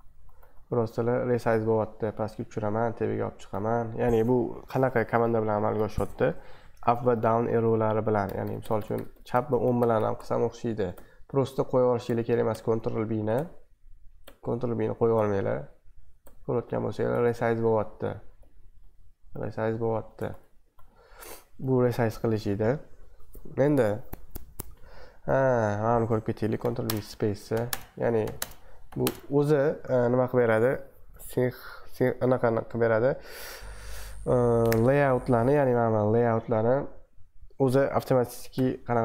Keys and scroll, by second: 0.2 ctrl+Up, 1.0 ctrl+Up, 1.5 ctrl+Down, 1.6 ctrl+Down, 1.9 ctrl+Down, 2.6 ctrl+Up, 2.8 ctrl+Up, 3.1 ctrl+Up, 3.6 ctrl+Down, 3.7 ctrl+Down, 4.0 ctrl+Down, 4.4 ctrl+Up, 4.5 ctrl+Up, 4.8 ctrl+Down, 5.5 ctrl+Up, 5.8 ctrl+Down, 6.0 ctrl+Down, 6.2 ctrl+Up, 6.3 ctrl+Up, 8.2 ctrl+Left, 8.8 ctrl+Left, 9.3 ctrl+Right, 9.5-10.9 ctrl+Left, 10.9 ctrl+Right, 11.1-12.0 ctrl+Right, 12.0 ctrl+Left, 12.5-13.3 ctrl+Left, 13.3 ctrl+Right, 13.5-14.2 ctrl+Right, 14.2-15.1 ctrl+Left, 15.1-16.2 ctrl+Right, 16.2-17.1 ctrl+Left, 17.1-17.7 ctrl+Right, 17.7-18.4 ctrl+Down, 18.4-18.9 ctrl+Up, 18.9-19.4 ctrl+Down, 19.4-19.8 ctrl+Up, 19.9 ctrl+Down, 20.4 ctrl+Up, 20.5 ctrl+Down, 22.3 super+2, 25.3 super+1, 26.6 ctrl+b, 26.8-29.0 typing, 27.5 ctrl+b, 29.3 super+2, 35.7 super+1, 38.5 ctrl+b.